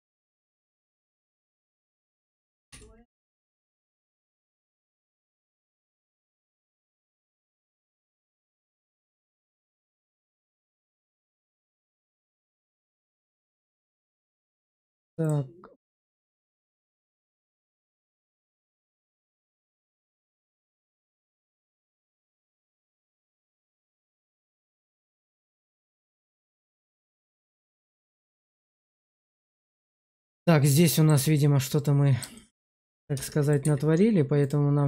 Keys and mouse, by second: 0.7 shift+click, 2.6 2, 3.8 click, 5.2 2, 5.9 click, 6.4 shift+z, 6.7 shift+middle click, 7.2 middle click, 8.7 shift+middle click, 9.9 shift+middle click, 10.5 middle click, 11.6 Tab, 12.5 shift+middle click, 13.7 x, 15.9 ctrl+z, 16.5 x, 18.1 shift+middle click, 18.4 middle click, 19.1 click, 20.0 shift+click, 21.0 shift+click, 21.4 Tab, 22.1 click, 22.6 shift+z, 23.1 middle click, 23.9 shift+middle click, 24.5 shift+middle click, 24.9 shift+middle click, 26.2-27.4 middle drag, 27.8 shift+z, 28.3 shift+middle click, 28.8 middle click, 29.6 shift+middle click, 30.1 middle click, 30.8 shift+middle click, 31.2 middle click, 32.2 shift+middle click, 33.0 Tab, 33.5 a.